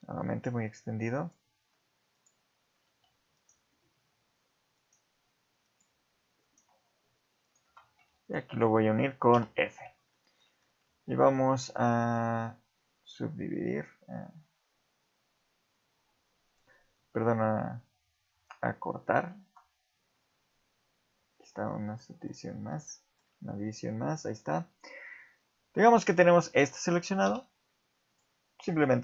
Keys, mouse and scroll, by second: 0.3 ctrl+right click, 1.2 ctrl+right click, 2.1 ctrl+right click, 2.8 ctrl+z, 3.4 ctrl+right click, 4.8 ctrl+right click, 5.6 ctrl+right click, 6.4 ctrl+right click, 7.4 ctrl+right click, 8.2 shift+click, 9.3 f, 10.1 shift+middle click, 11.3 ctrl+r, 19.3 ctrl+r, 22.0 shift+middle click, 22.4 scroll up 1, 22.9 shift+middle click, 23.9 scroll up 2, 24.3 shift+middle click, 25.3 scroll down 4, 25.7 scroll up 2, 26.5 shift+middle click, 27.2 x.